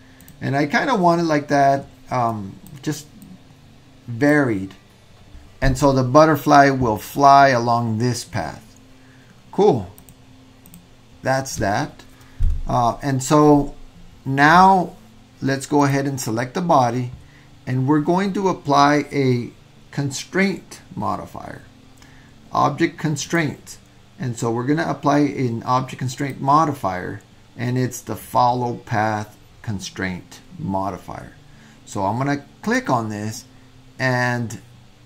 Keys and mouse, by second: 2.3 click, 3.3-4.3 drag, 10.1 click, 23.2 click, 26.3-32.9 drag.